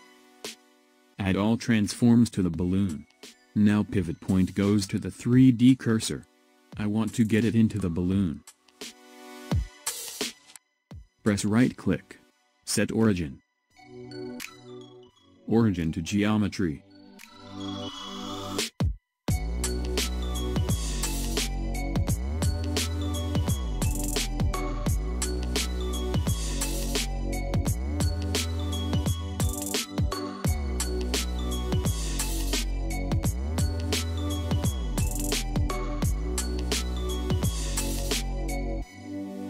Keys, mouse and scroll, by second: 0.2 click, 1.9 ctrl+a, 3.8 click, 4.8 click, 5.5 click, 6.2 click, 7.0 click, 11.4-18.7 right drag, 18.7 click, 23.4 click, 26.1 click, 27.3 shift+z, 28.6 drag, 29.7 shift+z, 31.6 s, 38.5 click, 39.3-39.4 scroll down 1.